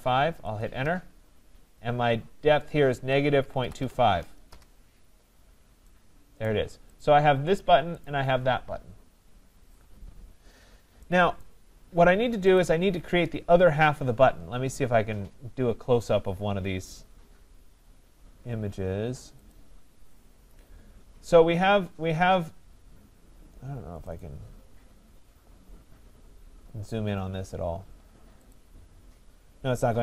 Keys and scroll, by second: 0.4 Return.